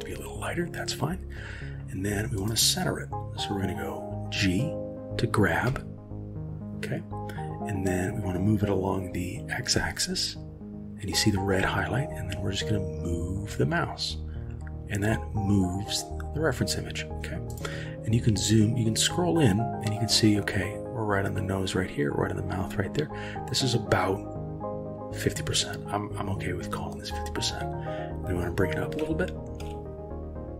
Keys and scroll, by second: 5.7 g, 29.0 g.